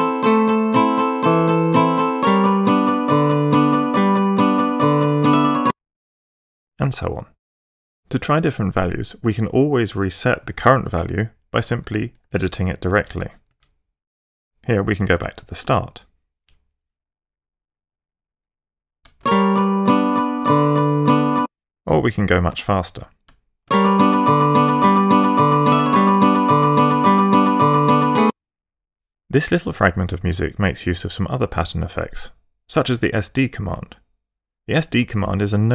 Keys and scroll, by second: 5.6 F8, 12.1 Page_Up, 13.5 Left, 15.3-16.1 typing, 19.2 alt+space, 21.4 F8, 21.6 Page_Up, 22.5 6, 23.6 alt+space, 28.2 F8.